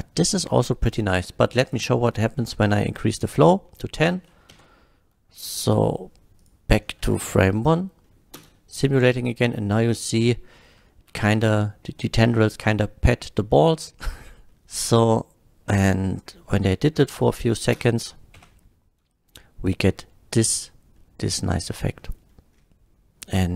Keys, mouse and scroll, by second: 1.7 click, 2.8 click, 3.6 middle drag, 4.6 shift+Left, 5.6 middle click, 6.4 click, 6.8 middle drag, 7.3 shift+click, 8.1 middle click, 8.3 shift+l, 8.3 space, 9.1-10.5 middle drag, 10.9 shift+middle drag, 12.3 shift+middle drag, 13.5-13.8 shift+middle drag, 14.5 middle click, 17.1-17.5 middle drag, 17.8 space, 18.4 F12, 21.0 middle click, 22.0 middle drag, 22.3 scroll down 1.